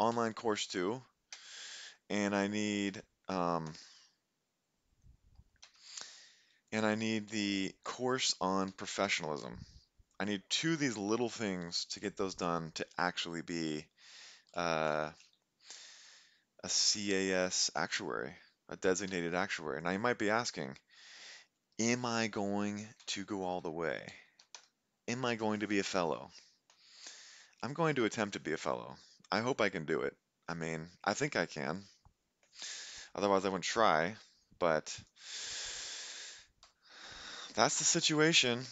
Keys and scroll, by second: 0.1 typing, 1.3 Return, 2.7 Up, 2.9 F2, 3.7 BackSpace, 5.6 Return, 7.8-9.3 typing, 19.1 Escape, 22.4-24.3 typing, 24.6 Return, 36.7 Delete.